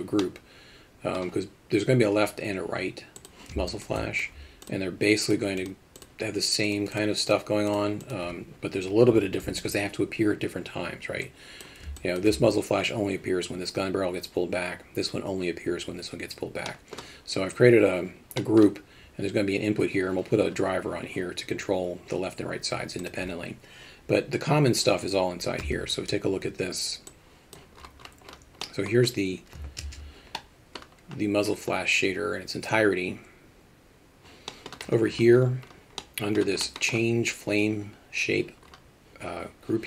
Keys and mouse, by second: 0.3 middle click, 3.2 click, 3.7 alt+shift+middle drag, 4.0 middle drag, 5.3 click, 6.0 click, 6.7 click, 7.0 click, 7.3 click, 11.4 click, 12.0 alt+shift+middle drag, 16.7 middle drag, 18.4 middle click, 25.7 Tab, 27.2-39.8 drag.